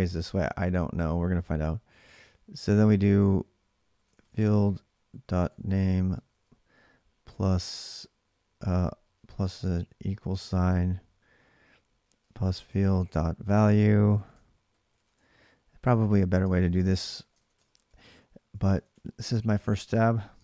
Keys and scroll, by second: 3.5-5.9 typing, 7.0 typing, 9.4-10.3 typing, 12.0-19.6 typing, 20.2 alt+Tab.